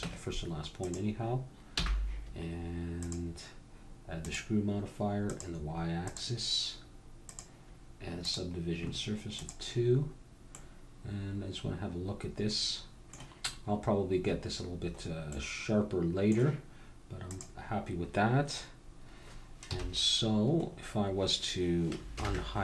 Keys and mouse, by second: 0.0 Tab, 1.8 n, 3.0-5.0 drag, 5.3-10.4 drag, 10.4 middle click, 10.9 click, 11.2-12.3 middle drag, 15.3-17.2 middle drag, 17.2-18.9 drag, 19.1 click, 19.7 KP_1, 20.7-22.6 middle drag, 22.1 alt+h.